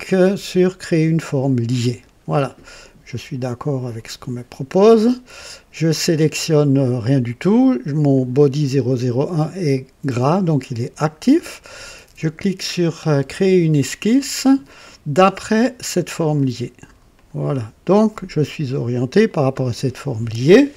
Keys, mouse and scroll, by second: 1.2 click, 3.9 click, 8.1 click, 13.8 click, 16.0 click, 17.1 click, 18.5-18.8 scroll up 1, 19.3 right click.